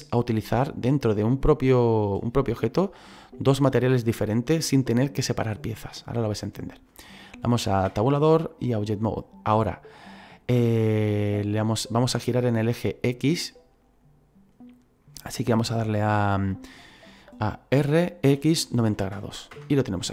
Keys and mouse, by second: 7.8 Tab, 8.6 click, 17.7 r, 18.2 x, 18.9 KP_9, 18.9 KP_0, 19.5 Return, 19.5 KP_Enter.